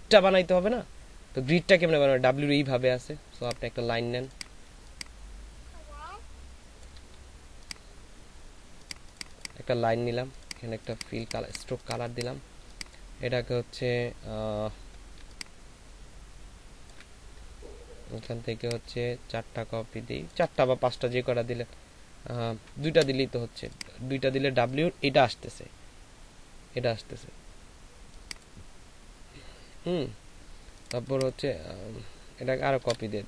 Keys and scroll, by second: 11.2 space, 14.7 space, 32.9 ctrl+z.